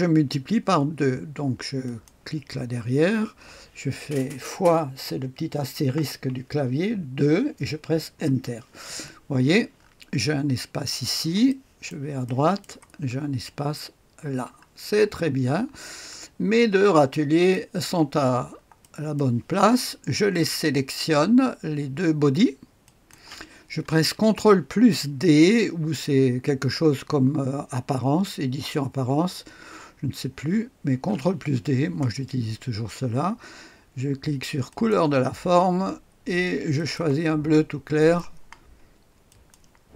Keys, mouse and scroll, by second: 1.7 click, 5.8 KP_Multiply, 7.0 KP_2, 8.0 Return, 9.7-10.9 scroll up 1, 10.9-11.4 scroll down 1, 11.4-12.9 drag, 12.9-14.5 scroll up 1, 14.5-16.7 scroll down 2, 16.7-17.9 drag, 18.4-19.1 scroll up 1, 18.7 right click, 22.8 ctrl+click, 30.8 ctrl+d, 34.6 click, 36.7 click, 37.9 click, 39.2 click.